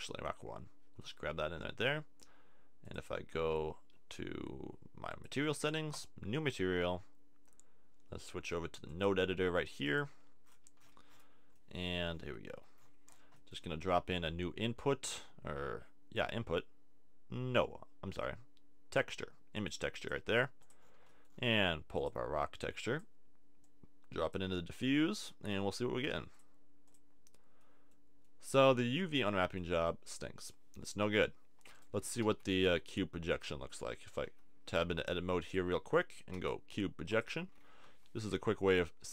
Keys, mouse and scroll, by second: 2.0 middle click, 8.9-10.8 drag, 10.8-12.2 middle drag, 12.5 t, 13.7 shift+a, 20.7 click, 32.0 Tab, 32.3 a, 32.7 a, 36.3 u, 37.8 a, 38.4 Tab.